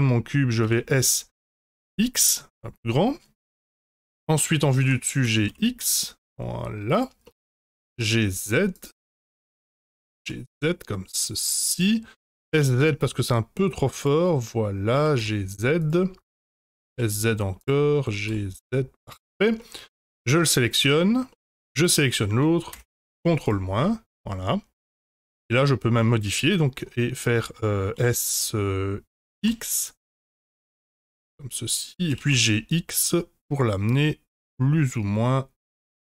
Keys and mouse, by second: 0.6 s, 3.7 middle click, 4.8 KP_7, 5.2 g, 7.2 middle click, 7.7 g, 9.0 middle click, 9.9 g, 12.4 s, 14.9 g, 16.7 s, 18.0 g, 19.5 middle click, 20.8 Tab, 21.3 middle drag, 21.8 shift+click, 22.8 ctrl+KP_Subtract, 23.4 click, 23.8-25.1 middle drag, 26.0 middle drag, 28.0 s, 32.0 g.